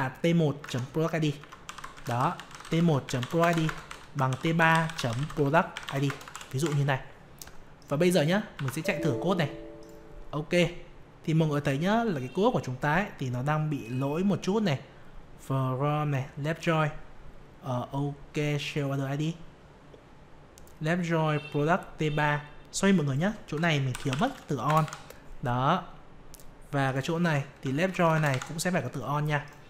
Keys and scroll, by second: 8.5 F5.